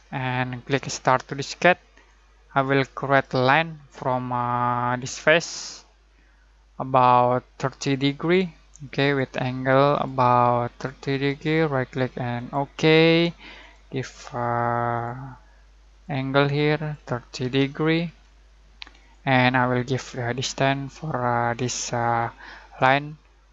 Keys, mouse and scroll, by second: 0.0 middle click, 1.3 click, 6.8-9.0 middle drag, 9.0 click, 11.2 right click, 12.3 click, 17.4 typing, 19.0 click, 21.5 click, 22.7 right click.